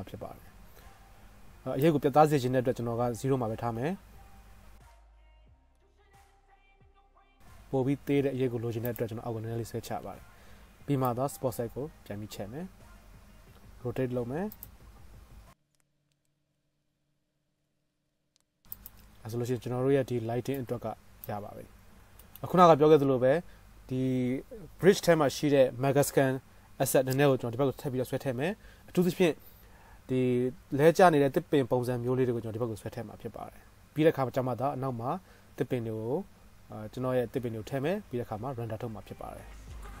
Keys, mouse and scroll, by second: 6.0 g, 7.3-8.5 drag, 8.5 middle click, 9.2-11.2 right drag, 11.2-14.8 middle drag, 12.8-16.4 drag, 12.8-14.8 right drag, 13.5 KP_7, 13.5 r, 15.0 g, 16.4 right click, 16.4 KP_0, 17.0-20.2 shift+drag, 17.0 shift+space, 17.7 shift+space, 18.1 shift+Left, 18.5-28.2 middle drag, 18.5-20.2 right drag, 20.9 click, 20.9 right click, 36.8-40.0 middle drag.